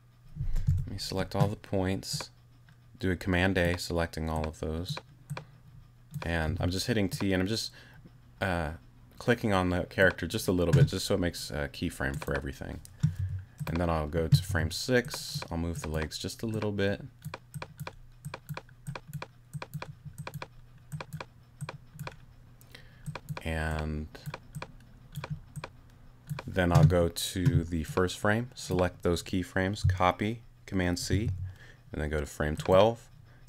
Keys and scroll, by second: 0.7 super+a, 6.5 t, 13.2 t, 14.5 t, 31.1 super+c.